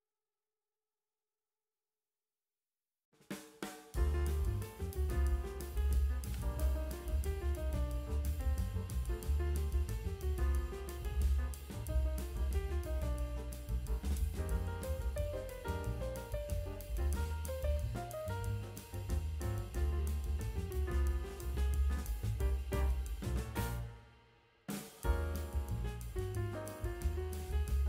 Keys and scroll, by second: 3.5 ctrl+alt+z, 9.6 ctrl+space, 9.8 [, 22.1 space, 25.2 ctrl+space, 26.3 ctrl+space.